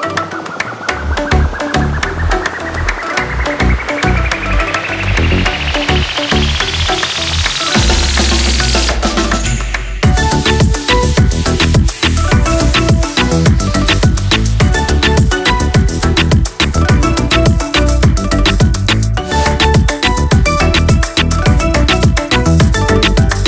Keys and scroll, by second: 20.8 3.